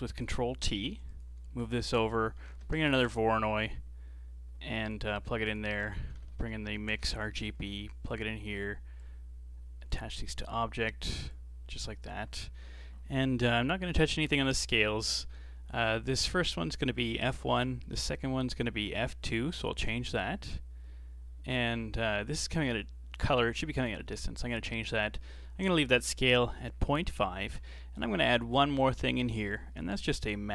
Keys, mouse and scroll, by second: 0.7 g, 1.5 shift+a, 5.3 shift+a, 9.0 click, 10.3 click, 11.3 click, 17.5-18.5 shift+middle drag, 18.5-19.8 drag, 19.8-20.2 scroll up 1, 20.2-20.8 middle drag, 20.8-21.5 scroll up 2, 21.5 middle click, 22.4 click, 27.6 scroll down 3, 28.0-28.8 middle drag, 28.8 click, 30.0 g.